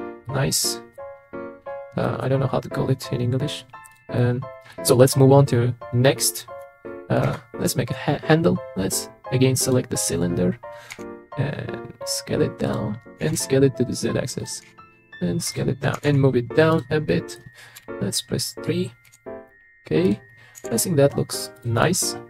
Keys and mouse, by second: 0.2-0.9 middle drag, 2.0 middle click, 3.9 click, 4.2 middle click, 7.2 shift+a, 10.9 s, 13.2 s, 13.3 z, 14.6 s, 15.5 click, 16.0 g, 16.0 z, 17.1 middle click, 17.8 KP_3, 19.1 s, 20.6 g, 20.7 z, 21.8 click, 22.0-22.2 middle drag.